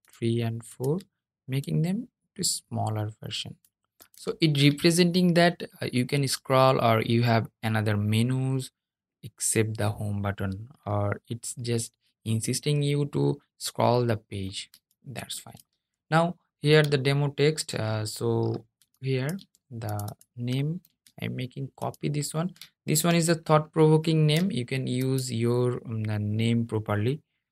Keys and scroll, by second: 19.9 super+o, 20.1 super+o, 20.3 super+c.